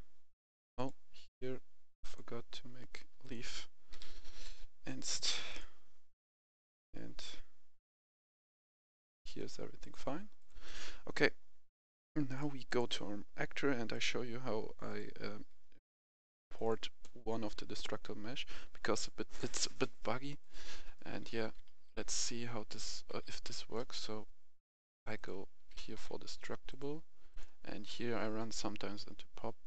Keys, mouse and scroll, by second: 0.4 click, 2.4-3.0 scroll down 1, 3.0 click, 3.7-4.3 typing, 5.3 click, 20.8-23.9 right drag, 21.1-22.5 typing, 23.9 typing, 24.6 click, 25.4-25.8 typing, 26.5 click.